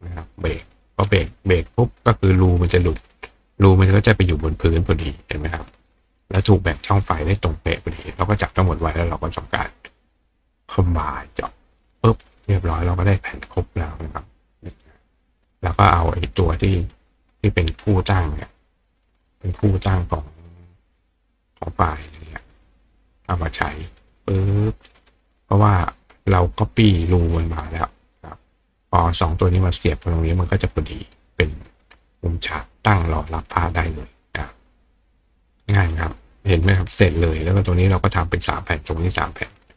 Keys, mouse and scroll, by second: 0.2 click, 0.8 click, 3.1 click, 3.9 click, 4.6 click, 5.3 click, 5.9 click, 6.4 click, 8.1 click, 11.4 click, 13.1 click, 13.5 click, 14.4 click, 14.7 right click, 17.0 click, 18.4 shift+click, 20.4 click, 21.6 click, 21.9-22.9 drag, 23.9-25.1 drag, 24.9 right click, 25.5 click, 26.2 click, 27.8 click, 31.7 right click.